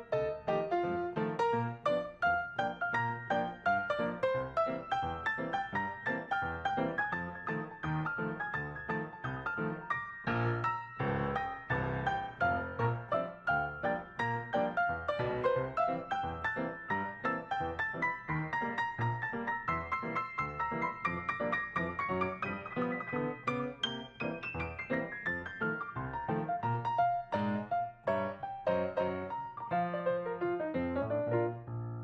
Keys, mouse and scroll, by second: 2.3 right click, 6.2 right click, 9.4 right click, 15.5 right click, 21.6 right click, 23.0-24.0 scroll down 4, 30.8 ctrl+s.